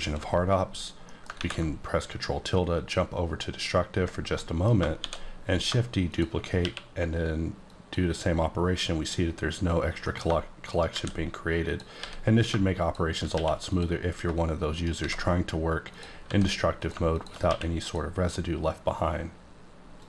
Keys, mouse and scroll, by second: 0.6-1.0 scroll down 3, 1.0 middle click, 1.3 ctrl+scroll down 1, 1.3 ctrl+`, 2.7 click, 4.3 middle click, 4.9 shift+d, 5.5 click, 6.6 q, 7.6 click, 10.0 middle click, 10.7 shift+right click, 10.9 shift+a, 11.6 click, 12.0 s, 12.4 click, 12.8 click, 13.3 q, 13.6 click, 14.1 scroll up 2, 14.7 shift+right click, 15.0 shift+a, 15.9 click, 16.3 s, 16.8 click, 17.4 q, 17.8 click.